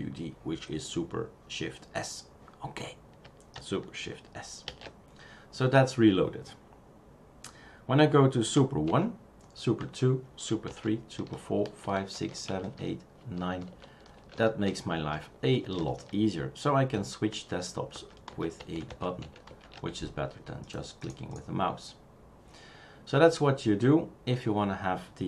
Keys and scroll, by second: 4.6 shift+super+s, 8.8 super+&, 9.8 super+é, 10.7 super+", 11.1 super+', 12.0 super+(, 12.7 super+§, 13.6 super+!, 14.1 super+!, 15.6 super+à, 16.9 super+&, 17.3 super+é, 17.9 super+", 18.3 super+', 18.7 super+&, 18.9 é, 19.2 super+&.